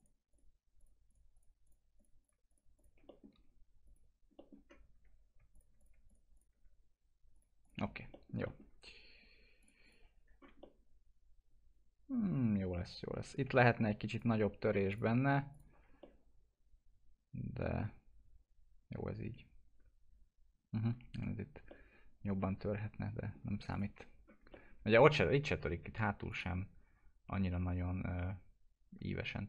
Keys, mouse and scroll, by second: 3.0 middle click, 3.8 click, 4.3 middle click, 4.5-5.1 scroll down 1, 5.5 click, 7.9 F4, 8.1 middle click, 9.6 click, 10.3 scroll down 1, 10.9-13.3 alt+middle drag, 13.3 scroll up 1, 13.6 F4, 14.1 click, 16.0-21.7 alt+middle drag, 21.7 alt+middle click, 23.7 click, 23.9 F4, 24.1-24.4 scroll down 1, 24.8-26.3 alt+middle drag, 26.3 click.